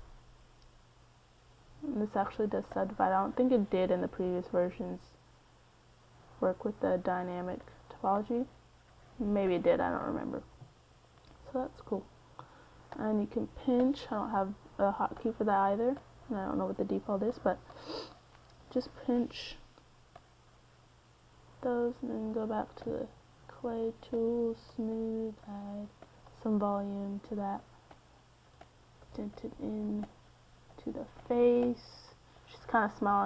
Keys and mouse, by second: 0.4-2.6 drag, 2.6 middle click, 4.3-6.5 drag, 6.5 ctrl+z, 8.2 middle click, 9.2-14.4 middle drag, 21.8 middle click, 23.1 click, 23.2 click, 23.4 middle click, 23.8 c.